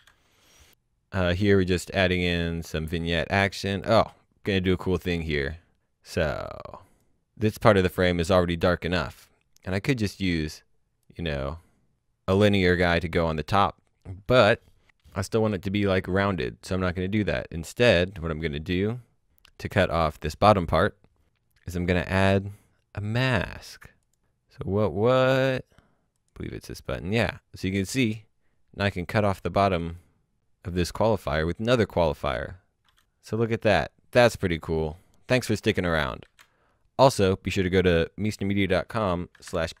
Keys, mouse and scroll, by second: 0.9 scroll down 1, 2.6 click, 3.4-4.5 scroll down 1, 4.8 click, 7.5 click, 15.4-17.1 scroll down 1, 17.1-17.6 scroll up 1, 18.0-18.6 scroll down 1, 18.6-20.4 scroll up 1, 21.2-22.4 scroll down 1, 23.5 click, 26.0 click, 27.4 click, 32.6 shift+h, 33.8 click, 36.2 h, 38.9 alt+Num_Lock, 39.4 p.